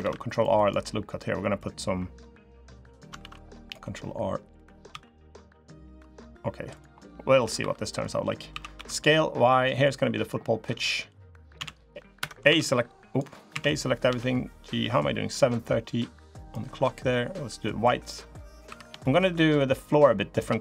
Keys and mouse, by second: 1.3-2.7 drag, 2.9 ctrl+r, 4.6 s, 6.7 click, 7.3 3, 7.6 click, 8.5 s, 9.7 click, 11.9 Escape, 12.2 s, 13.3 a, 13.8 g, 17.8 click, 18.1 click, 18.4 3, 18.8 shift+click, 19.1 middle click, 20.2 3.